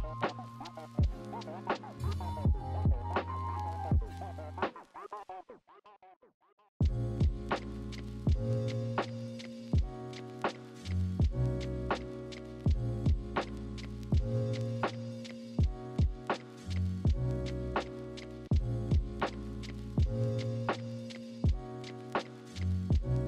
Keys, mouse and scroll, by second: 0.8 ctrl+-, 0.8 ctrl+=, 1.2 right click, 2.6 right click, 3.2 right click, 6.0 ctrl+z, 7.0 ctrl+z, 7.6 ctrl+z, 8.9 ctrl+-, 9.1 ctrl+=, 10.1 ctrl+=, 10.8 ctrl+=, 12.0 ctrl+-, 12.2 ctrl+=, 12.3 ctrl+z, 12.4 ctrl+=, 13.7 ctrl+z, 15.0 ctrl+z, 15.6 ctrl+z, 18.0 ctrl+-, 19.5 ctrl+=, 22.2 ctrl+-, 22.6 ctrl+=, 22.7 ctrl+-, 23.0 ctrl+=.